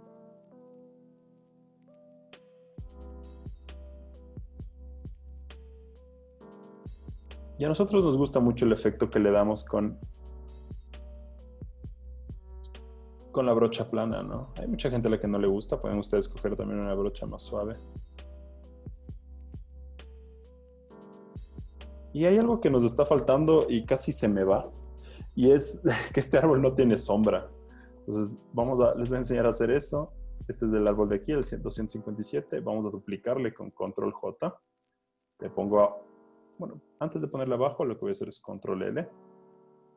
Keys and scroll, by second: 5.9 super+d, 6.2 z, 8.1 alt+super+z, 11.6 b, 18.8 super+d, 19.0 z, 21.0 z, 21.7 z, 22.9 h, 27.5 z, 28.7 z, 31.7 z, 33.6 super+j, 38.5 super+l.